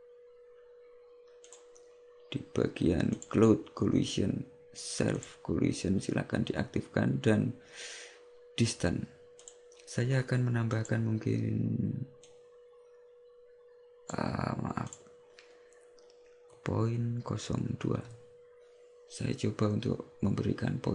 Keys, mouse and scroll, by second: 1.5 click, 3.2 click, 5.3 click, 9.5 click, 12.3 click, 15.1 click.